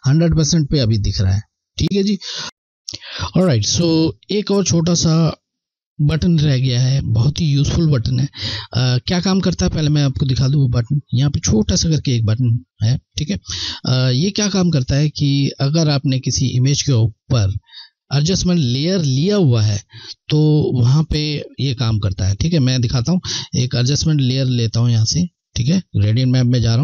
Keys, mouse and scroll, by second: 8.5 scroll, 9.4 ctrl+alt+scroll, 16.0 ctrl+click, 24.2 ctrl+Left.